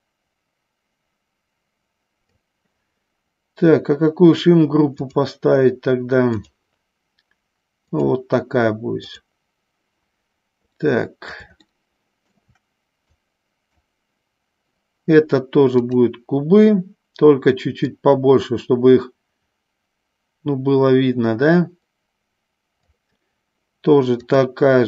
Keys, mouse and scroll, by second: 5.3 click, 6.7-8.3 drag, 9.2 click, 11.0-12.7 middle drag, 13.3 click, 16.0 click, 18.0-23.2 drag, 24.4 click.